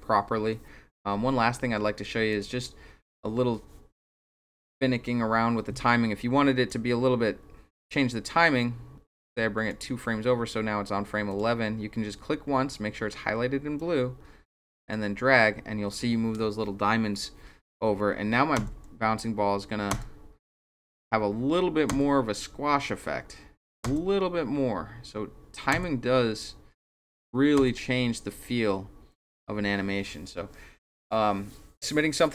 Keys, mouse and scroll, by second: 2.3 click, 6.7-9.7 drag, 11.3 click, 13.8-14.9 drag, 18.6 Return, 19.9 Return, 21.9 Return, 23.8 Return, 25.7 Return, 27.6 Return.